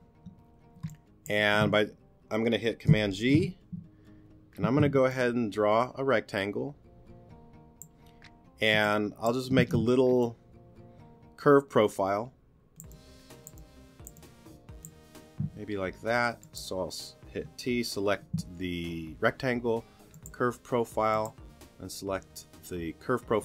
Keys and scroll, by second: 0.8 space, 3.1 super+g, 4.6 s, 8.7 space, 15.4 t.